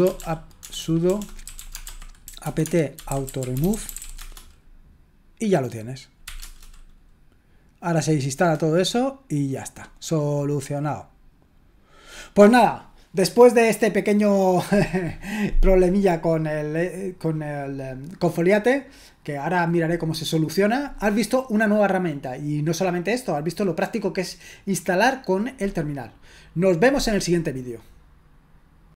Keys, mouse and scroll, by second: 0.0-4.6 typing, 6.2 typing.